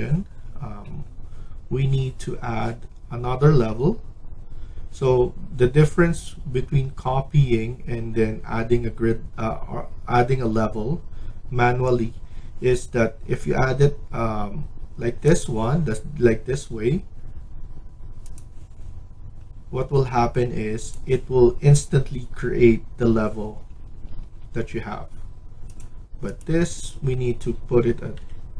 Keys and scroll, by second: 23.8 Escape, 24.1 Escape, 28.1-28.5 typing.